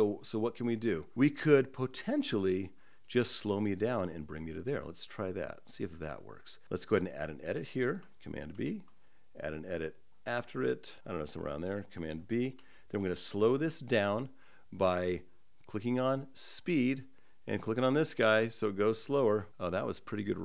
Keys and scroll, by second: 8.2 super+b.